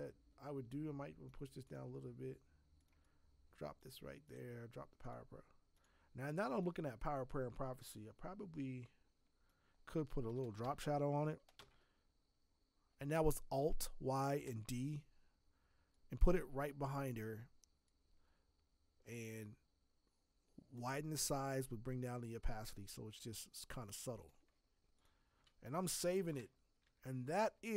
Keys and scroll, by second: 10.4 alt+l, 10.4-11.6 typing, 25.8 ctrl+s, 26.8 alt+Tab, 27.3 alt+Tab.